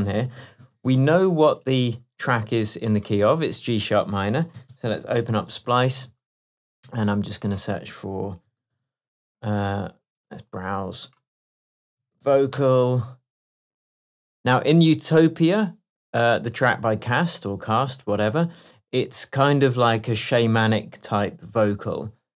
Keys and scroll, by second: 0.2-1.3 typing, 4.6 ctrl+space.